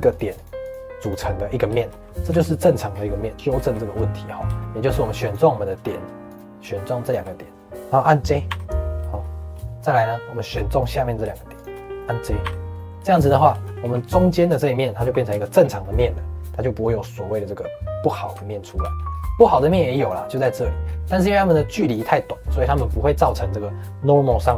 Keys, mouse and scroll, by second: 0.0 click, 0.3 click, 0.6 click, 0.9 click, 1.7 shift+middle click, 2.2 3, 2.8-3.2 scroll down 2, 3.2 click, 3.3-4.6 middle drag, 4.6 1, 5.2 click, 6.2 click, 7.0 shift+click, 8.4 j, 9.0-10.7 shift+middle drag, 10.7 click, 11.5 shift+click, 11.9 middle click, 12.4 j, 12.7 shift+middle click, 13.3 scroll down 2, 13.6 shift+middle click, 13.8 3, 14.0 click, 14.9 g, 15.7-18.3 middle drag, 18.3 Tab, 18.8 shift+middle click, 19.0 scroll up 1, 19.4 shift+middle click, 19.9 click, 20.2 click, 20.4 shift+middle click, 20.8 scroll up 3, 21.0 middle click, 21.2 scroll down 4, 21.4-24.5 middle drag.